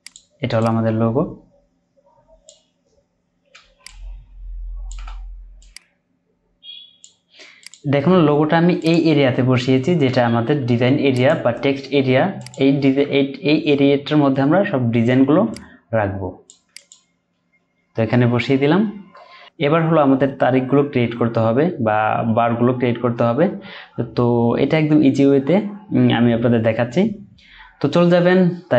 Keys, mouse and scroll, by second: 3.8 alt+shift+click, 9.8 Down, 10.0 Down, 13.3 Down.